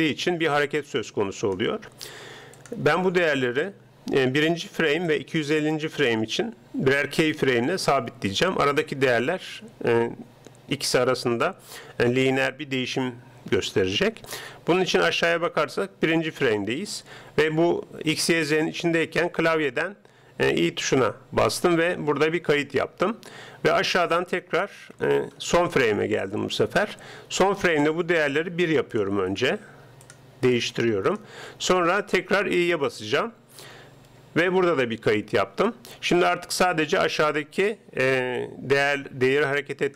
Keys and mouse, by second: 2.6-4.4 drag, 5.0-6.9 drag, 21.0 i, 24.0-25.6 drag, 25.6 right click, 28.2-32.2 drag, 34.1 |, 36.8-38.6 drag.